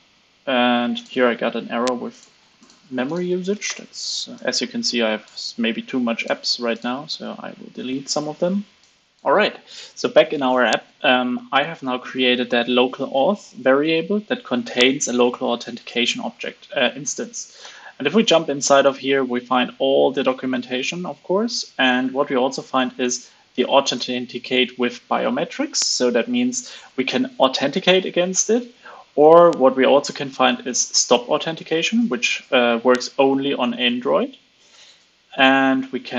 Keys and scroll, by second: 13.4 super+c, 17.5 super+b.